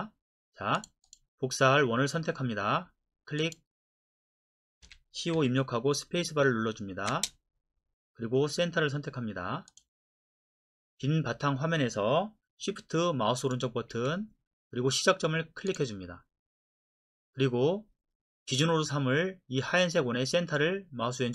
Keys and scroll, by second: 4.8-5.3 typing, 7.1 space.